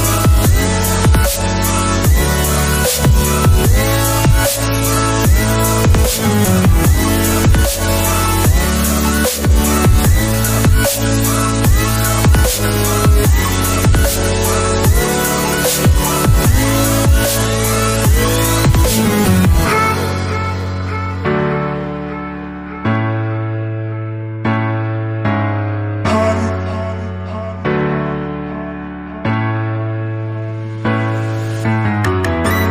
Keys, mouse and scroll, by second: 7.6 alt+Tab, 18.3 middle click, 20.5 alt+Tab, 28.1 alt+Tab.